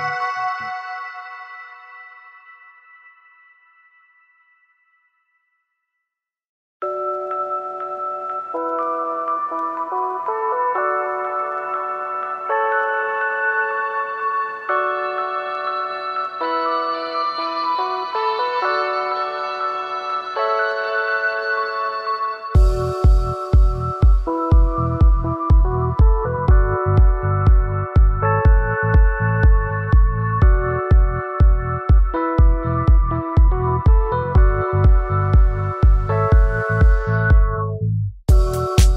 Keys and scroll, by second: 0.1 ctrl+a, 1.6 ctrl+d, 2.2 ctrl+space, 18.0 ctrl+space, 25.8 ctrl+a, 26.9 ctrl+d, 30.4 ctrl+alt+s.